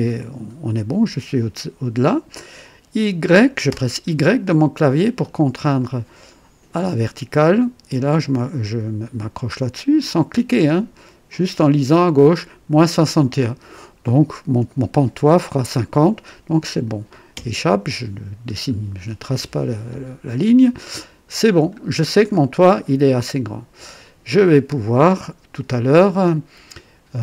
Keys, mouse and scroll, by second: 3.6 y, 4.9-5.2 scroll down 2, 5.8 right click, 17.3 Escape, 18.3-18.6 scroll down 1, 19.3-20.6 right drag, 20.7 scroll up 1, 21.3 scroll down 1, 22.1 scroll down 1, 23.1-26.0 drag.